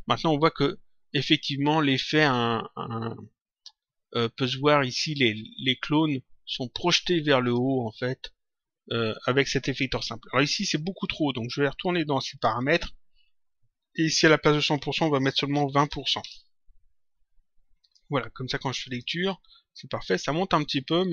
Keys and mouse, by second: 7.3 click, 12.3 click, 14.1 click, 16.1 Return, 17.7 click.